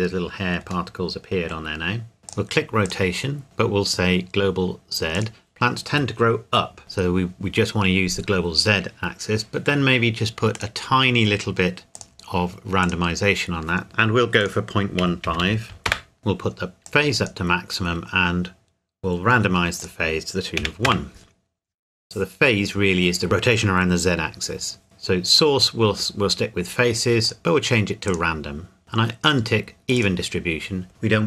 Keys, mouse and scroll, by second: 0.9 middle click, 1.8 scroll up 1, 2.2 click, 10.5 click, 12.8 click, 14.4 click, 15.0 KP_Decimal, 15.2 KP_1, 15.4 KP_5, 15.8 KP_Enter, 16.8 click, 20.6 KP_1, 20.8 KP_Enter, 27.2 click, 29.9 click.